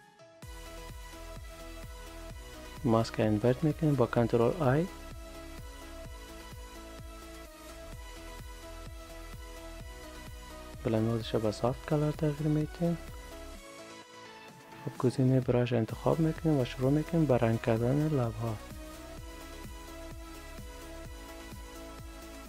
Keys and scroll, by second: 1.8 ctrl+i.